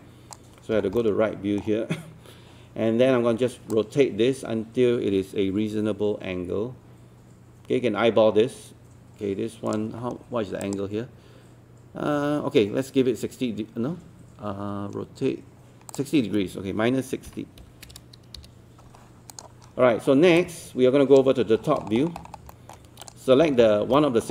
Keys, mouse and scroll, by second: 0.8 scroll down 1, 1.0-2.5 alt+middle drag, 3.7-10.5 drag, 17.6 KP_6, 19.3-21.5 drag, 21.6 scroll down 1, 23.1 click, 23.5 scroll up 1, 24.0 alt+middle click.